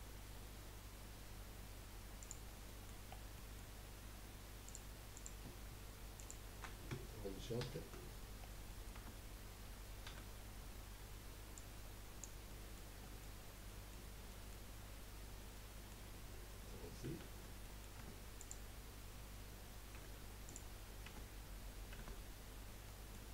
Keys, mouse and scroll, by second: 0.6 scroll up 2, 2.2 click, 2.6 middle click, 3.1 scroll down 3, 3.3 middle click, 3.7-4.4 scroll up 2, 5.1 click, 6.1 shift+click, 7.6 ctrl+j, 8.4 scroll down 3, 8.8 middle click, 8.9 Tab, 10.1 a, 11.5 click, 12.6-17.2 middle drag, 17.2 ctrl+z, 17.6 middle click, 18.0 Tab, 18.4 click, 20.4 click, 21.1 Tab, 21.9 Tab, 22.5-22.8 scroll up 1, 22.9 middle click.